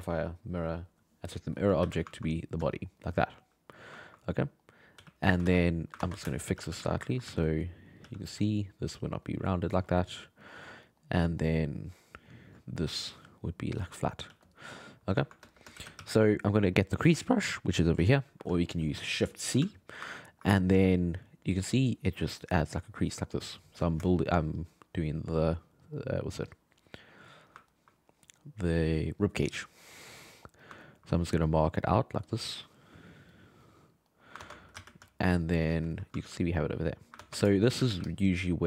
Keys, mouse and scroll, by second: 1.8 alt+a, 2.1-2.7 ctrl+middle drag, 4.0-4.5 ctrl+middle drag, 4.5 right click, 5.0 r, 5.4 alt+a, 5.8 right click, 6.0 ctrl+Tab, 6.3 shift+middle click, 6.5 g, 6.7 f, 7.1 ctrl+middle click, 7.2 f, 7.8 click, 8.0 f, 8.5-9.7 drag, 9.7 shift+middle click, 11.2 alt+middle click, 11.6 alt+middle click, 12.0 alt+middle click, 12.9 click, 13.8 shift+middle click, 14.3 f, 14.8 click, 15.2 ctrl+middle click, 15.8 shift+c, 16.0 f, 17.8 click, 18.5 alt+middle click, 19.2 shift+c, 19.5 shift+c, 20.1 ctrl+middle click, 20.7 f, 21.7-24.0 drag, 24.0 shift+middle click, 24.6 click, 25.4-26.5 middle drag, 26.5-27.5 drag, 27.5-32.2 ctrl+middle drag, 32.2-33.3 drag, 33.3-34.4 middle drag, 34.4 ctrl+Tab, 34.7 alt+a, 35.1 alt+middle click, 35.9-36.9 ctrl+shift+middle drag, 36.9 right click, 37.2 ctrl+Tab, 37.5 shift+middle click, 37.7 g, 37.9 f.